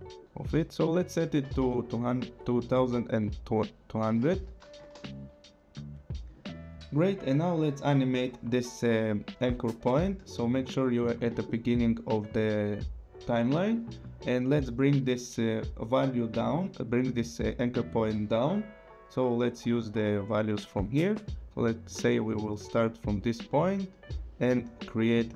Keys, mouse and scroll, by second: 0.8 click, 1.5 scroll down 2, 4.1 KP_0, 4.8 Return, 17.9 click.